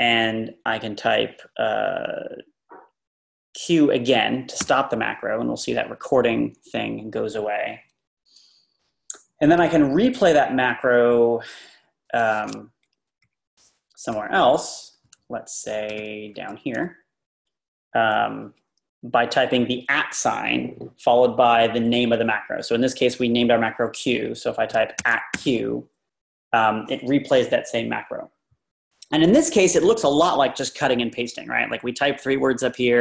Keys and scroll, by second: 4.7 q, 13.3 Page_Up, 15.0 Page_Down, 15.1 Page_Down, 15.6 Page_Down, 25.0-25.3 typing.